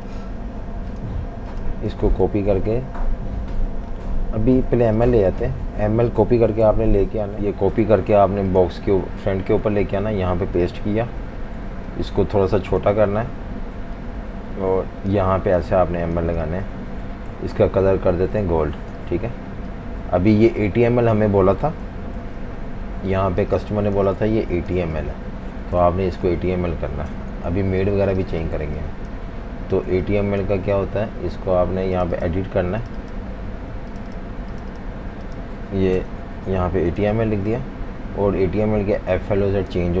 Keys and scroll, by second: 2.3 super+c, 6.4 super+c, 7.8 super+c, 9.6 super+v, 15.3-17.3 typing, 19.0 v, 22.2 super+0, 23.4-25.6 typing, 25.8 super+0, 27.1 super+-, 27.3 super+-, 27.5 super+-, 28.1-31.3 typing, 36.0-37.5 typing, 39.8-40.0 typing.